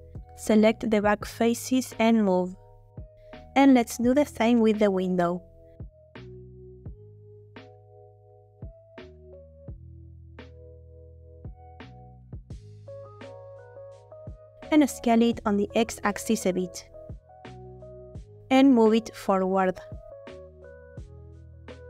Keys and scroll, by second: 1.3 g, 1.4 x, 3.1 Tab, 3.7 Tab, 11.5 g, 11.7 x, 14.8 a, 16.3 s, 16.5 x, 19.1 g, 19.3 x, 20.9 g, 21.1 x.